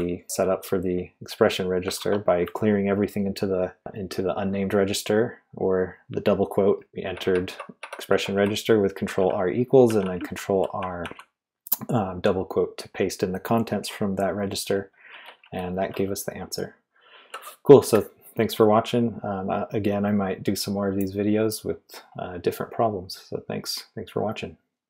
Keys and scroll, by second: 0.0-0.8 typing, 1.9 shift+v, 6.5-10.8 typing, 13.8-15.9 typing.